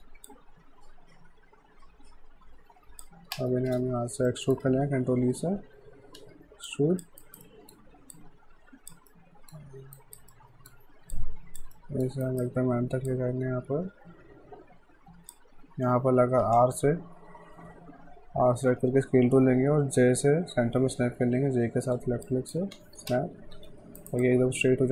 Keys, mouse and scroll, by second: 0.3 alt+click, 3.4 space, 4.3 alt+middle click, 5.6 e, 6.7 click, 7.2 alt+right click, 7.5 alt+middle click, 8.2 click, 9.1 alt+middle click, 10.0 alt+right click, 10.3 alt+middle click, 11.2 click, 11.8 alt+middle click, 12.3 alt+right click, 13.1 click, 16.5 r, 22.3 click, 22.5-23.6 typing, 24.0 alt+right click, 24.2 alt+click.